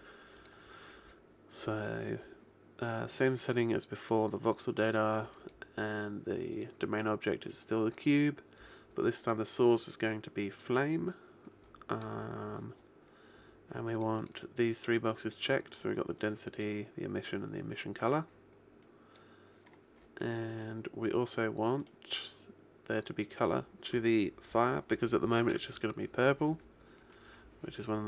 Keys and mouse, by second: 0.5-4.8 drag, 5.5 click, 7.1-8.3 middle drag, 9.3 click, 10.9-11.9 middle drag, 14.0 click, 16.2 click, 18.9 click, 20.5 middle click, 21.9 click.